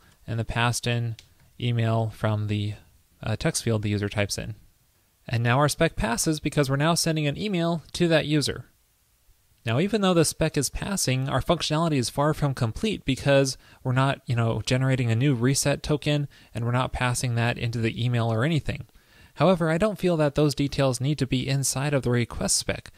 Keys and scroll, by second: 0.3 ctrl+p, 2.2 super+Right, 2.9 super+s.